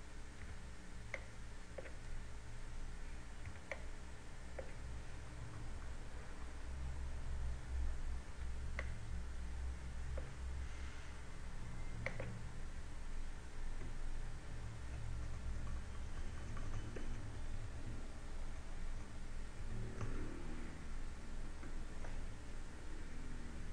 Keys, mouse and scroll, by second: 1.1 b, 4.0 b, 6.0 KP_2, 6.4 KP_2, 8.9 b, 12.2 click, 13.8 Tab, 15.8-17.2 typing, 17.6 KP_Subtract, 17.8 KP_Subtract, 18.0 KP_Subtract, 18.4 KP_Subtract, 18.6 KP_4, 20.2 KP_Subtract, 20.6 KP_0, 22.0 KP_0.